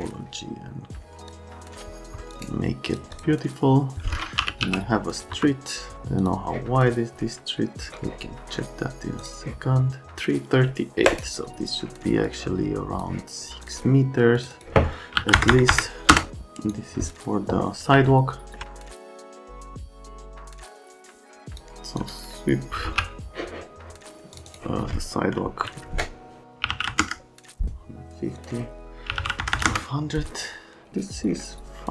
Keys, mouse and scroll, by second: 1.2 click, 2.1 F3, 2.3 click, 2.4 right click, 2.9 click, 3.2 click, 4.1-5.1 typing, 5.3 F3, 6.2 click, 6.8 middle click, 7.9 middle click, 9.2 click, 10.1 click, 11.1 scroll, 12.2 click, 13.6 click, 14.4 click, 14.5 click, 15.2 KP_6, 15.3 KP_0, 15.5 KP_0, 15.7 KP_0, 16.1 KP_Enter, 16.3 click, 18.0 alt+middle click, 19.3 click, 20.1 scroll up 1, 20.9 click, 21.0 scroll down 1, 21.2 middle click, 21.5 click, 22.0 click, 22.5-23.3 typing, 24.3 click, 24.5 click, 26.6 KP_1, 26.7 KP_5, 26.9 KP_0, 27.0 KP_Enter, 29.1 KP_1, 29.1 KP_2, 29.4 KP_0, 29.5 KP_0, 29.7 KP_Enter, 30.7 middle click.